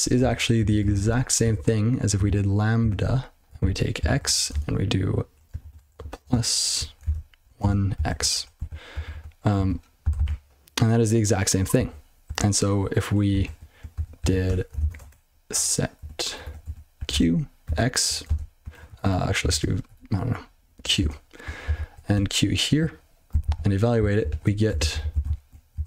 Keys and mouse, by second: 0.2 ctrl+space, 0.3 ctrl+f, 0.5 ctrl+f, 0.6 ctrl+f, 0.8 ctrl+f, 1.0 ctrl+w, 1.5-4.5 typing, 3.6 ctrl+b, 4.2 ctrl+f, 5.6-7.9 typing, 8.5 ctrl+d, 8.9 ctrl+f, 9.1 ctrl+f, 9.5 ctrl+f, 10.2 ctrl+c, 11.7 ctrl+b, 12.5 ctrl+w, 13.4 ctrl+shift+o, 13.9 ctrl+y, 14.2 ctrl+a, 14.5 Tab, 14.8 ctrl+alt+space, 15.0-21.0 typing, 21.6 ctrl+n, 22.1 q, 23.4 ctrl+c, 23.9 ctrl+n, 24.1 ctrl+n, 24.3 ctrl+a, 24.7 ctrl+space, 24.7 ctrl+n, 24.9 ctrl+n, 25.1 ctrl+w, 25.2 ctrl+p, 25.4 ctrl+p.